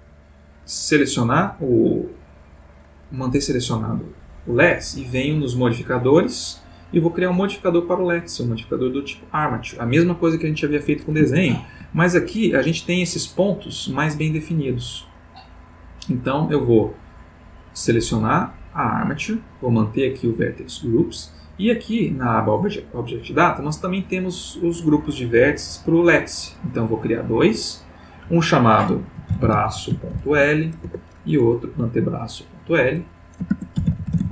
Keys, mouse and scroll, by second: 5.4 click, 6.8 click, 9.0 click, 11.3-11.9 shift+middle drag, 16.3 click, 18.4 click, 21.4 click, 26.7 click, 27.3 click, 27.8 click, 29.0-30.2 typing, 30.8 Return, 32.4 click, 33.5-34.3 typing.